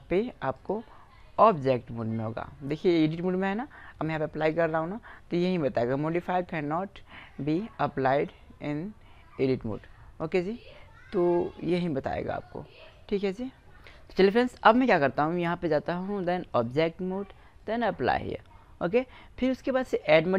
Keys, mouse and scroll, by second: 0.6-1.0 drag, 1.7-2.3 drag, 2.7-6.1 drag, 15.5-19.2 drag, 20.2 middle click.